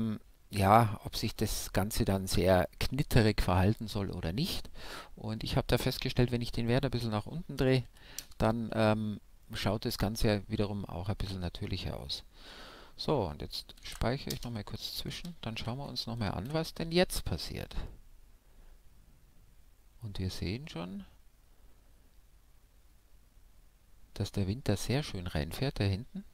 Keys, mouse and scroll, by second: 5.5-7.5 drag, 8.5-12.8 middle drag, 12.8 ctrl+s, 14.6 shift+Left, 15.2 alt+a.